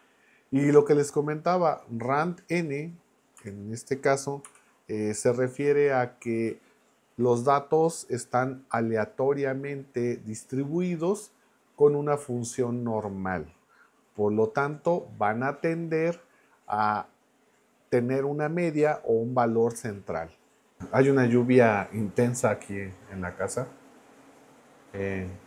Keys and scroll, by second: 3.4 Left, 4.4 n.